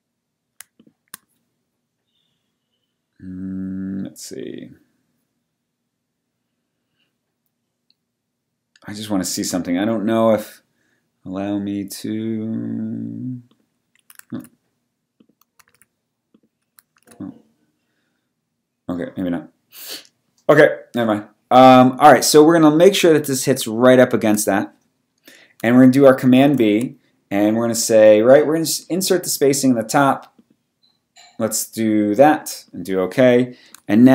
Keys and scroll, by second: 14.3 super+z, 15.7 super+z, 17.0 super+z, 26.4 super+b.